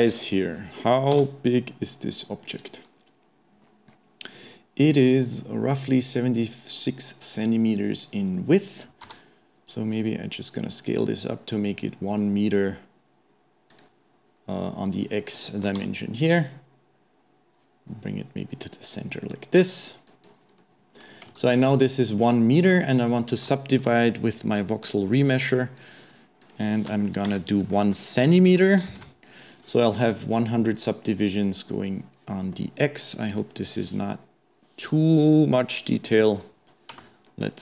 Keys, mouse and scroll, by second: 0.4-1.1 scroll down 2, 1.1 n, 2.6 click, 20.6-21.2 middle drag, 21.2-22.6 scroll down 1, 22.6-23.0 scroll up 1, 23.0-25.8 middle drag, 25.8-28.8 drag.